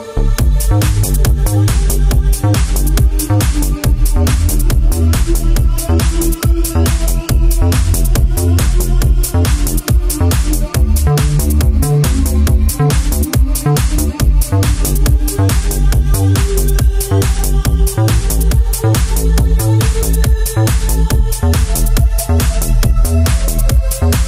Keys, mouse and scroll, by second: 1.2-2.0 typing, 2.5 click, 2.7 scroll down 2, 2.9 shift+middle click, 3.4 scroll up 2, 4.2-5.6 typing, 6.6 click, 7.2 7, 8.0 Tab, 8.6 middle click, 10.2 shift+middle click, 10.6 scroll up 2, 10.8 Tab, 11.8 ctrl+r, 13.4 Escape, 14.2 ctrl+r, 14.8 click, 15.1 double click, 15.9 ctrl+r, 16.2 double click, 16.4 double click, 16.5 double click, 16.9 middle click, 19.1 typing, 20.1 scroll down 3, 20.3 shift+middle click, 21.4 z, 22.8 click, 23.4 typing, 23.8 click.